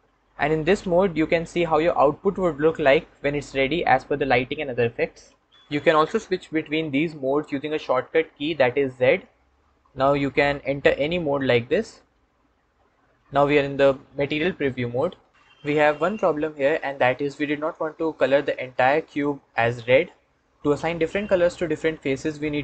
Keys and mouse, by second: 10.2 z.